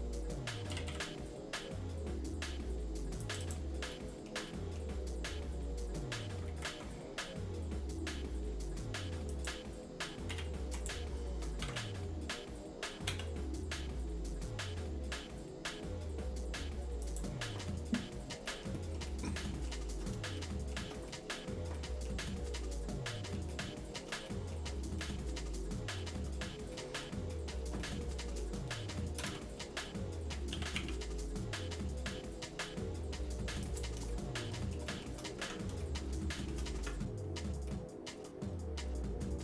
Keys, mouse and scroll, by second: 0.7 g, 3.4 click, 3.9 shift+middle click, 4.5 middle click, 6.4 ctrl+b, 10.4 e, 11.6 alt+s, 17.6 shift+middle click, 18.5 shift+middle click, 18.8 shift+middle click, 19.4 shift+middle click, 20.4 shift+middle click, 21.1 middle click, 21.8 shift+middle click, 22.6-24.0 shift+middle drag, 24.3 middle click, 25.0 shift+middle click, 26.7 middle click, 27.1 scroll up 1, 27.3 shift+middle click, 27.8 shift+middle click, 29.2 ctrl+KP_Add, 30.5 s, 34.1 shift+middle click, 34.6 shift+middle click, 34.9 shift+middle click, 35.4 Tab, 35.8 shift+middle click, 36.8 Tab, 37.7 shift+middle click, 38.7 scroll down 1.